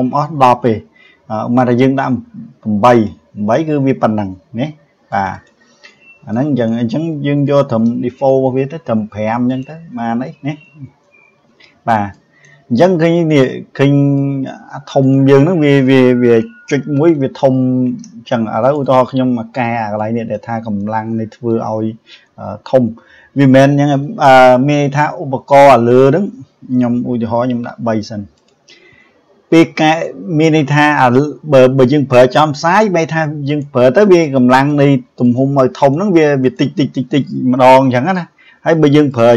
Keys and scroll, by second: 16.6 ctrl+z, 37.8 ctrl+z.